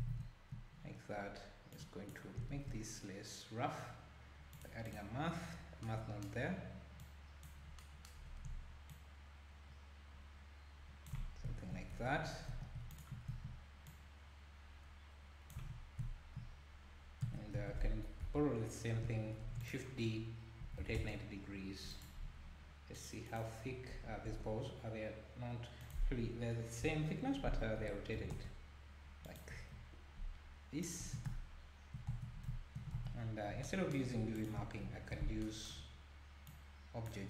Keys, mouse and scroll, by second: 0.1 alt+a, 1.8 click, 2.5 shift+a, 5.0 shift+a, 7.0-7.8 drag, 8.9-11.4 shift+drag, 11.9 Tab, 12.2 scroll down 2, 12.5 1, 12.9 alt+click, 13.9 click, 15.6 Tab, 17.2 Tab, 17.6 a, 18.2 KP_1, 19.3 shift+d, 20.6 r, 22.9 click, 26.8 KP_7, 27.8 r, 31.0 Tab, 32.1 Tab, 33.0 Tab, 33.2-33.6 scroll down 4, 34.4 click, 34.9 ctrl+t, 36.5-37.2 drag.